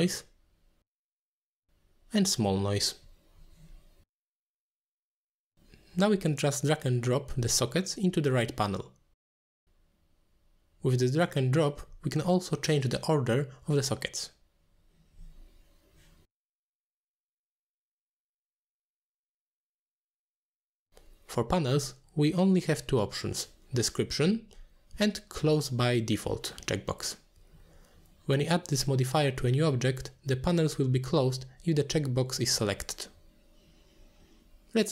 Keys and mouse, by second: 0.2 t, 1.6-3.0 shift+drag, 3.7-5.6 shift+drag, 4.6 l, 11.7 click, 13.8 click, 16.3 click, 16.5 click, 17.0 click, 18.1 click, 19.3 click, 20.6 click, 21.8 click, 22.3 click, 22.8 click, 23.1 click, 23.6 click, 24.0 click, 24.5 click, 25.5 middle click, 30.0 click, 30.5 click, 32.4 click, 32.9 click.